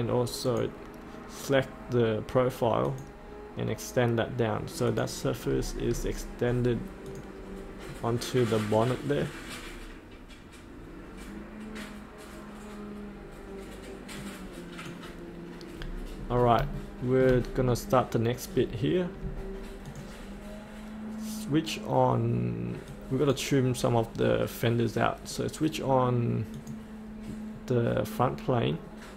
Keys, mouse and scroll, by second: 5.4-5.8 scroll up 2, 6.7-7.1 scroll up 1, 7.1 click, 7.9 middle click, 9.5-14.1 scroll down 1, 14.1-15.8 drag, 15.8-16.7 scroll up 1, 16.8 shift+middle click, 17.6-19.8 scroll up 1, 19.8-23.9 drag.